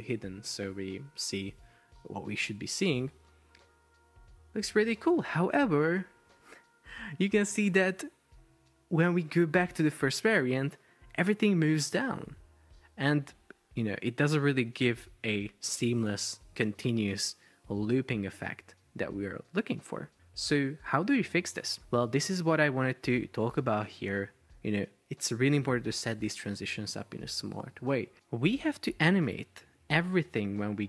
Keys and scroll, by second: 2.5 super+p, 20.2 Escape.